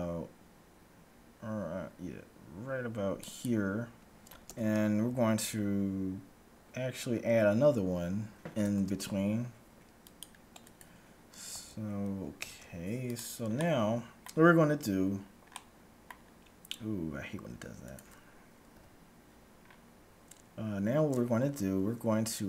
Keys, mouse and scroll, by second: 4.5 a, 8.7 ctrl+r, 11.5 a, 12.5 ctrl+Tab, 13.7-17.4 middle drag, 17.4-18.7 scroll down 1, 17.9-19.5 right drag, 18.7 KP_Decimal, 19.7-22.4 middle drag.